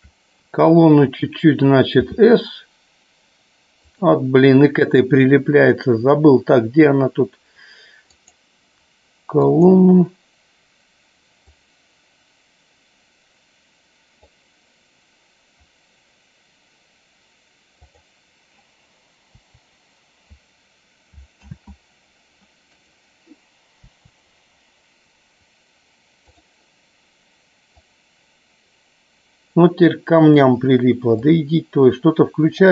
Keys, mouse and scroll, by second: 8.3 click, 9.6 click, 11.6-14.3 drag, 17.9 click, 19.4 Delete, 21.6 ctrl+z, 22.9 click, 23.9 Delete, 27.9-30.4 drag, 31.2-32.7 drag.